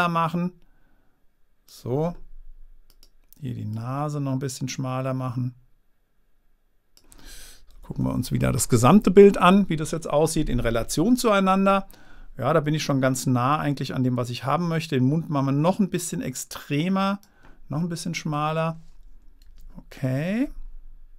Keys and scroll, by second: 8.2 super+-.